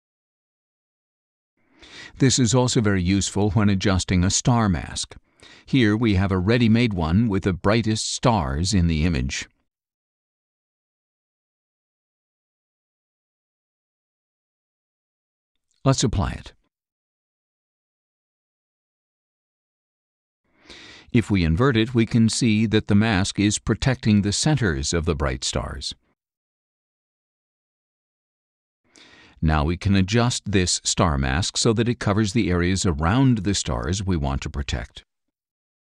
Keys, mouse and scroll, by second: 0.6 click, 1.9-4.5 drag, 6.0 click, 8.9 click, 10.6-11.3 scroll down 2, 11.0 click, 12.0 space, 12.2-13.9 drag, 15.5-18.1 drag, 19.8 click, 21.5 click, 22.6 scroll down 1, 23.2 middle click, 23.3 scroll down 1, 24.7 middle click, 24.7 scroll down 1, 27.3 space, 27.6-28.8 drag, 29.3-32.1 drag.